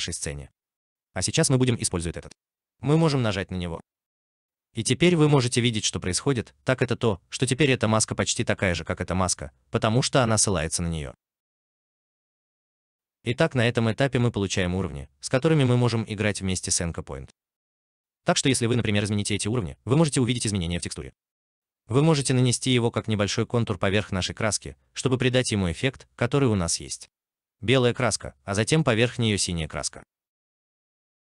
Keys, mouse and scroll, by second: 12.6 alt+middle click, 13.1 alt+right click, 21.8 alt+right click, 22.6 alt+right click, 28.0 alt+right click.